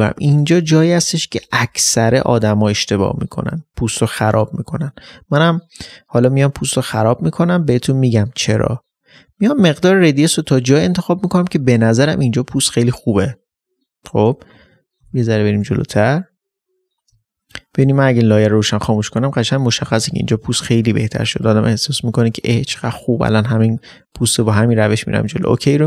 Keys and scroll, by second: 15.9 space.